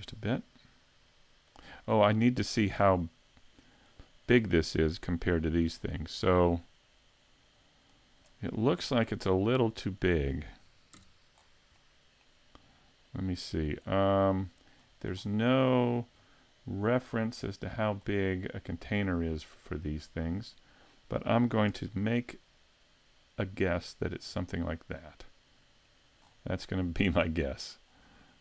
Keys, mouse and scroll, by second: 1.6 click, 1.9 scroll up 3, 2.7 right click, 5.0 click, 7.2 click, 8.4-8.8 scroll up 4, 8.8 shift+middle click, 9.5 scroll up 3, 9.9 shift+middle click, 10.9 KP_Decimal, 11.4-11.8 scroll down 4, 11.8 middle click, 13.1 click, 14.8-15.6 scroll down 8, 15.6 middle click, 16.2 scroll up 4, 16.8 middle click, 18.0-18.5 scroll down 2, 18.5 middle click, 21.0 middle click, 21.7 s, 24.2 click, 24.4 middle click, 26.3-27.4 scroll down 4, 27.6 click.